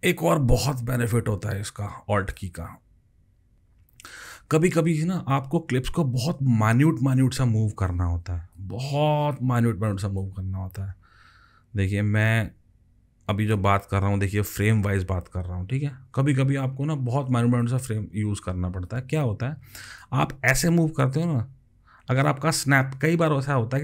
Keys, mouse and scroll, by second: 6.7-8.5 alt+scroll up 28, 10.5-12.6 alt+scroll up 31.